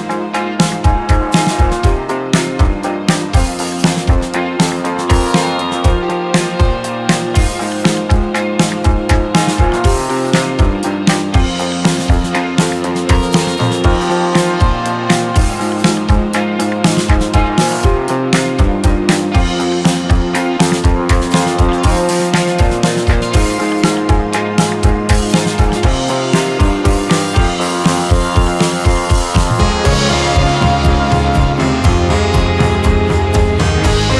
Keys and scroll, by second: 2.7 space, 2.9 F3, 7.9 ctrl+r, 8.5 F3, 16.2 F2, 17.1 Escape, 21.1 ctrl+z, 24.9 ctrl+r, 30.3 F3, 32.9 shift+F2.